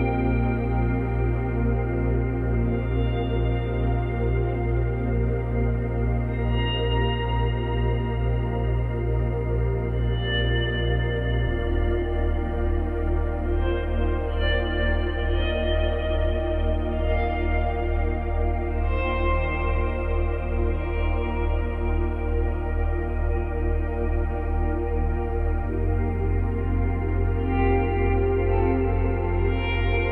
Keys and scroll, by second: 1.0 space, 2.3 space, 5.0 space, 6.0 space, 10.7 space, 13.3 space, 22.7 ctrl+z, 27.0 space.